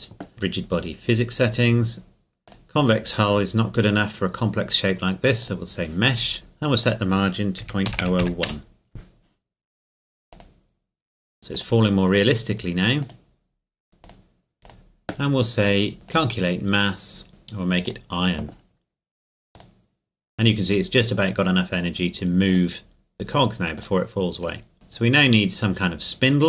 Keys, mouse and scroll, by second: 2.5 click, 5.4 click, 6.8 click, 7.6 KP_Decimal, 7.9 KP_0, 8.2 KP_1, 8.5 KP_Enter, 10.4 click, 14.7 click, 17.9 click.